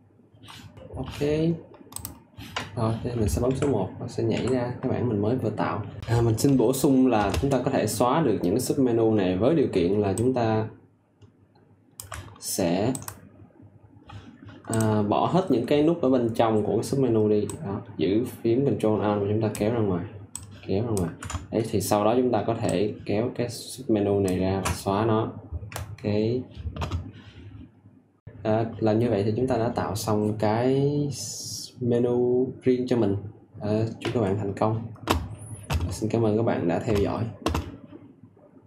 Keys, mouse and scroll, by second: 1.9 click, 3.4-4.3 typing, 6.0 click, 10.1 ctrl+click, 17.4 ctrl+alt+click, 22.6 ctrl+alt+click, 28.5 1.